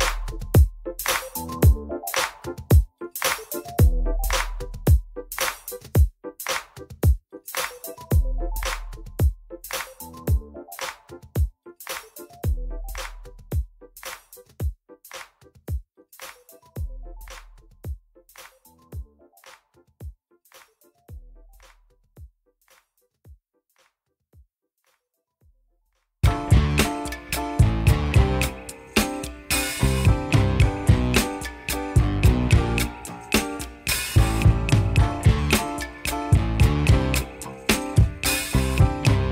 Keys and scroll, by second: 0.8 F4, 3.8 F3, 7.3 F3, 7.9 ctrl+z, 10.3 ctrl+z, 12.0 F3, 13.6 ctrl+r, 15.0 ctrl+r, 16.8 ctrl+r, 17.9 F3, 18.7 ctrl+r, 19.9 ctrl+r, 22.8 ctrl+r, 25.1 F4, 27.5 F3, 28.5 F3, 29.0 ctrl+r, 29.6 F3, 30.7 F4, 31.4 ctrl+c, 37.0 F4.